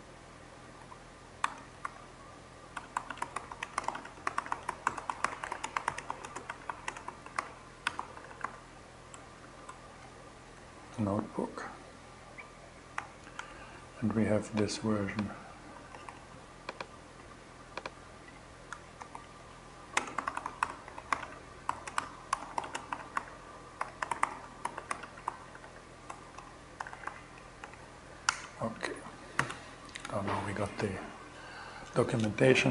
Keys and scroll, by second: 0.0-8.9 typing, 10.2 shift+BackSpace, 12.8 Return, 15.4 super+c, 18.2 Return, 18.5 super+v, 19.4-28.8 typing, 27.7 Return, 29.5 shift+Return.